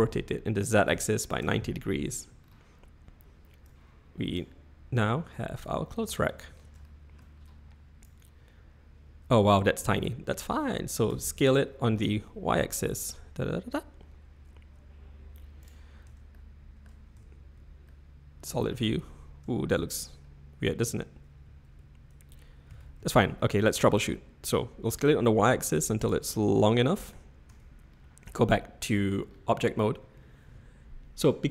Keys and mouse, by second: 3.7 click, 5.5 click, 6.0 z, 6.9-7.2 shift+middle drag, 8.0-9.5 drag, 11.1 s, 16.1 Tab, 16.3 middle click, 17.1 z, 17.8-18.3 middle drag, 18.3 click, 19.0 ctrl+z, 19.5 ctrl+z, 21.8 y, 22.7 s, 26.7-27.2 middle drag, 27.5 Tab, 28.4-29.1 shift+middle drag.